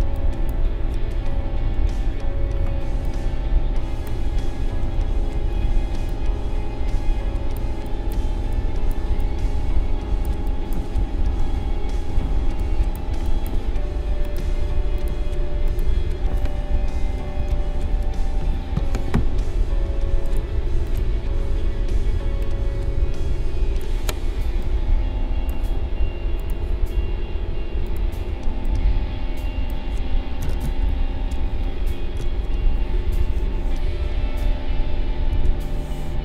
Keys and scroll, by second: 1.7 ctrl+=, 2.6 space, 4.8 ctrl+=, 11.4 ctrl+-, 12.0 space, 17.2 ctrl+c, 24.4 space, 28.3 space, 32.2 ctrl+=, 34.1 space.